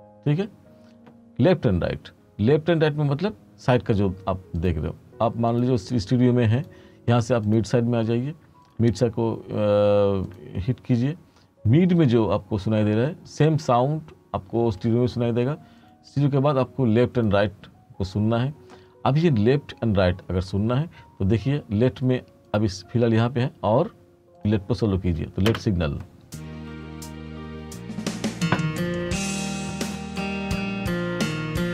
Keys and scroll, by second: 25.6 space.